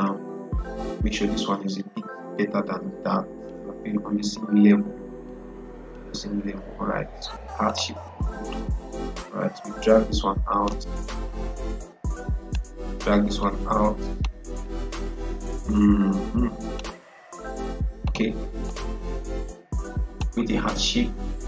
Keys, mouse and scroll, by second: 2.2-21.3 drag.